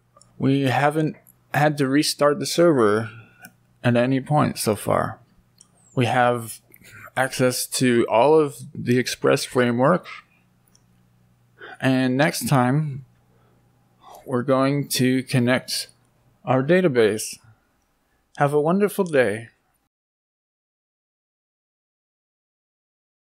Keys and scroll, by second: 12.2 BackSpace, 14.2 Up, 14.6 Up, 14.7 Up, 14.9 Up, 15.2 Up, 17.5 Up.